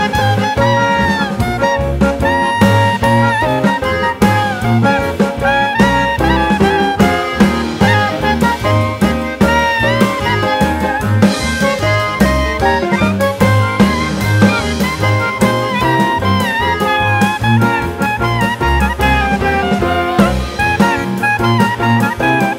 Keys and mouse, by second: 0.0 click, 1.7 click, 8.2 click, 10.4 x, 15.1 click, 19.2 g, 22.2-22.5 drag.